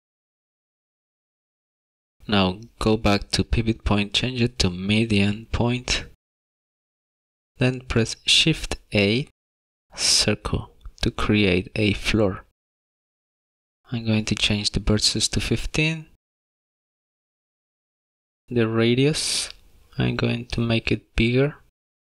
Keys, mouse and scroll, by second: 0.6 Tab, 0.8 shift+middle click, 0.9 scroll up 3, 1.0 middle click, 1.5 middle click, 4.5 click, 9.6 shift+a, 14.0 click, 19.0 scroll down 3, 20.4 click.